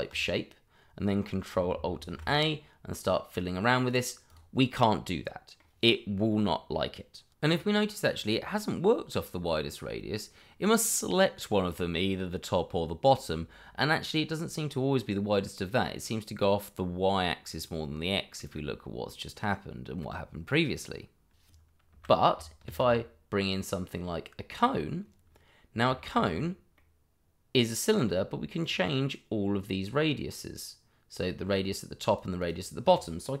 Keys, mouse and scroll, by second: 2.0 ctrl+alt+a, 3.0 click, 4.8 middle click, 21.9 Delete, 22.7 shift+a, 24.5 click, 26.0 middle click, 26.2-26.7 shift+scroll up 1, 26.7 middle click, 28.6 click.